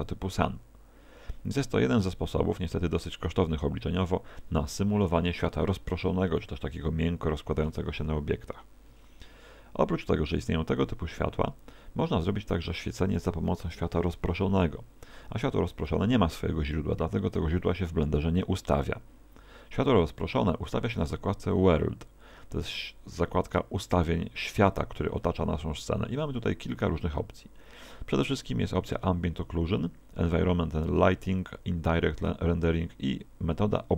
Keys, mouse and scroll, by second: 7.7 Escape, 10.8 x.